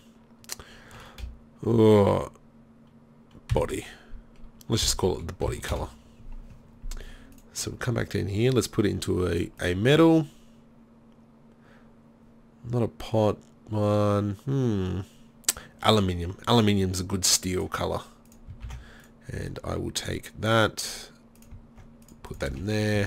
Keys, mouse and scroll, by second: 9.4-12.8 drag, 17.6-18.1 drag, 21.4-23.0 drag.